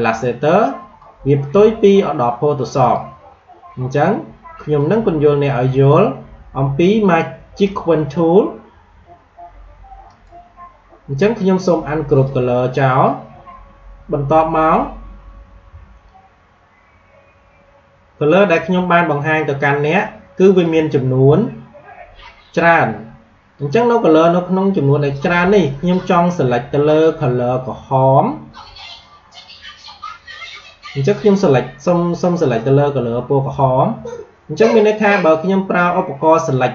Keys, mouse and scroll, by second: 10.0 right click, 12.0 click, 16.7 scroll up 1, 18.2 alt+scroll up 1, 18.9 space, 19.0 click, 19.3 space, 22.6 click, 22.9 space.